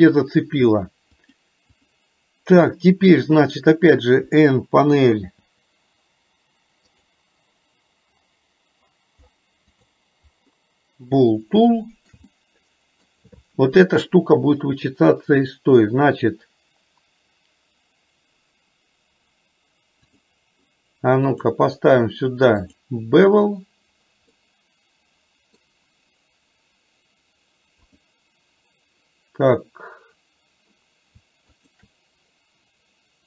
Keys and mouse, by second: 1.5 click, 5.3 n, 7.0 click, 9.8 click, 11.8 shift+middle click, 12.3 middle click, 21.5-22.9 drag, 24.4-25.8 middle drag, 28.0 click, 31.8 shift+click.